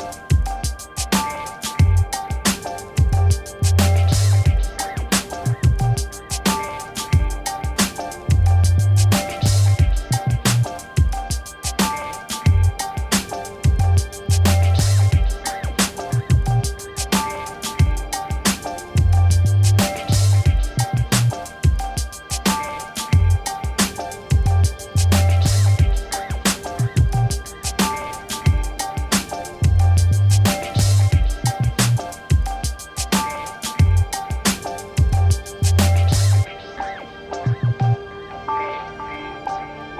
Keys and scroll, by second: 8.4 space, 14.1 m, 24.3 ctrl+d, 25.0 a, 27.3 p, 35.7 a.